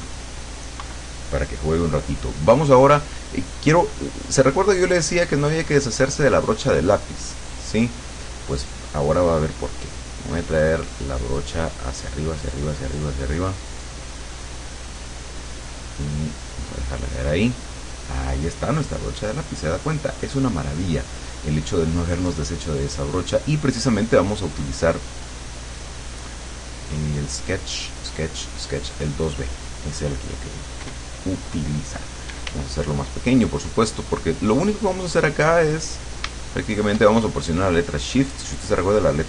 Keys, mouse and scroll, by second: 0.9 KP_Subtract, 4.1 click, 6.1 click, 10.1-16.7 drag, 17.5 click, 23.5 click, 25.2 click, 29.2 click, 32.3 d, 34.9 click, 35.3 click, 37.3-39.2 shift+drag.